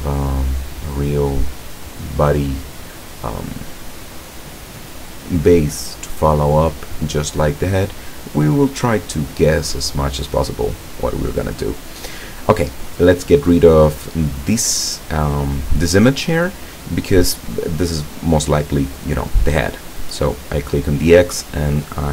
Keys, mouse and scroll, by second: 20.1 click.